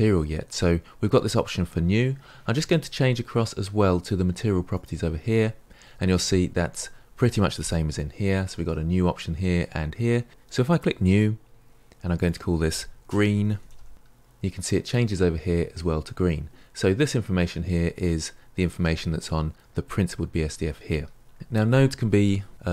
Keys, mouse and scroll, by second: 11.1-13.9 drag.